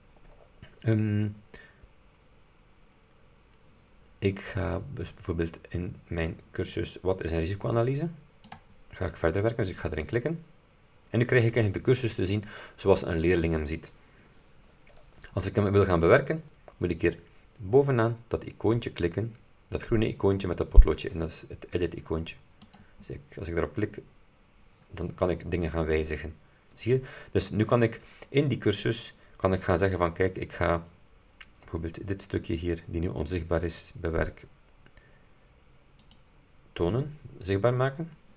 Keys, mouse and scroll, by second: 8.5 click, 22.7 click, 33.6 click, 36.1 click.